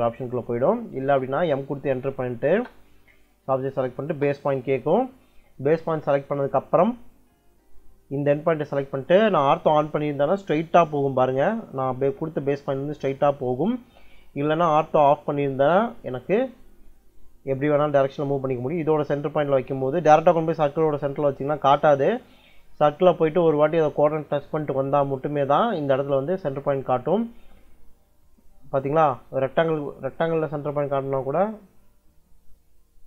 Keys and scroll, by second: 0.5 Escape, 2.3 space, 3.8 space, 15.4 ctrl+l.